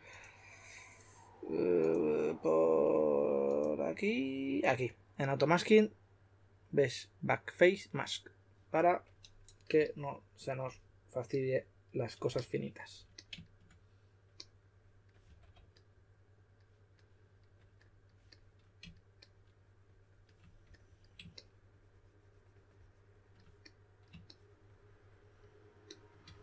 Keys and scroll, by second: 15.2 2.